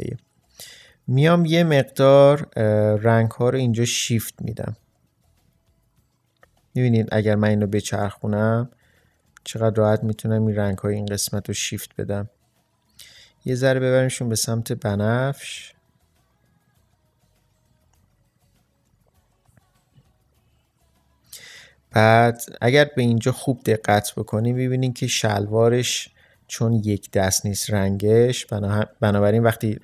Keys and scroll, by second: 22.8 ctrl+space.